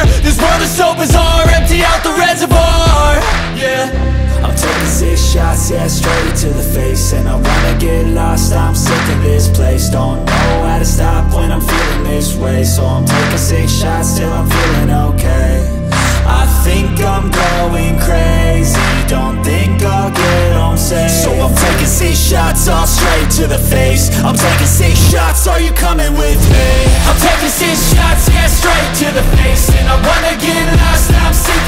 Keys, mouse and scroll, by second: 0.6 2, 1.9 alt+click, 2.9 alt+shift+click, 3.5-4.8 scroll down 1, 4.8-6.6 middle drag, 6.6 KP_1, 7.2-8.1 scroll up 2, 8.1 shift+middle click, 8.8 click, 9.6 ctrl+r, 11.8 3, 12.8-14.0 alt+shift+drag, 14.0 scroll down 2, 14.1 middle click, 14.9 shift+d, 16.5 p, 17.0 Tab, 17.2 click, 17.7 scroll up 1, 18.0-19.2 shift+middle drag, 19.2 ctrl+a, 20.2 Tab, 20.5 a, 20.8 middle click, 21.1 scroll up 2, 21.3 shift+middle click, 21.9-22.4 scroll up 1, 22.4 shift+middle click, 22.8 q, 25.3 scroll down 1, 25.4 middle click, 26.3 click, 27.2 middle click, 27.4 scroll up 3, 27.6-29.0 middle drag, 29.0-30.4 drag, 30.4 scroll down 1, 30.7 middle click, 31.3 Tab, 31.5 click, 31.6 scroll down 1.